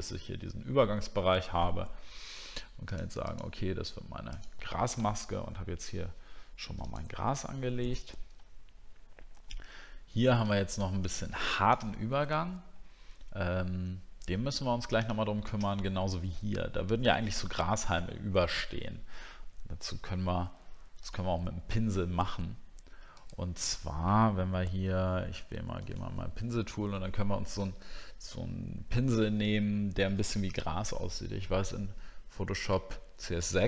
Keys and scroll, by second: 8.5 alt+scroll up 1, 9.5-9.8 alt+scroll up 1.